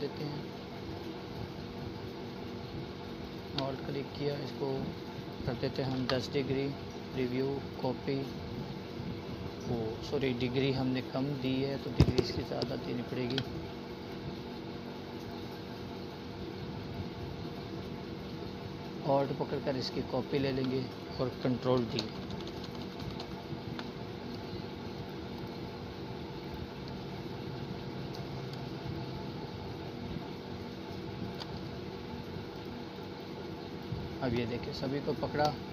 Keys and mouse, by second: 9.8 alt+Delete, 10.5 alt+click, 15.7-17.3 alt+drag, 18.2 ctrl+d, 21.5 click, 25.5-28.0 alt+shift+drag, 34.6 ctrl+z.